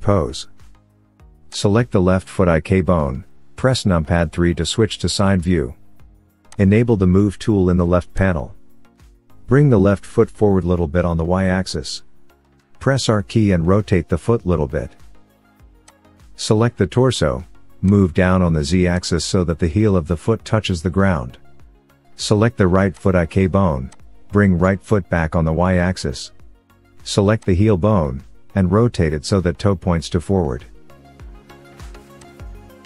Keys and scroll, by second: 3.1 KP_3, 29.1 r.